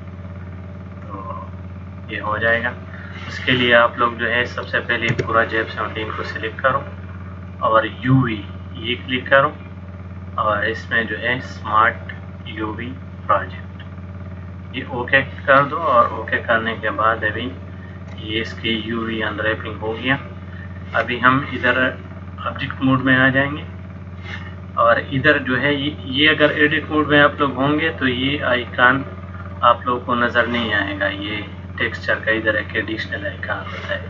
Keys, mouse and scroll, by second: 5.2 a, 7.6 click, 17.1 shift+middle click, 23.0 click, 27.6 click, 29.6 click.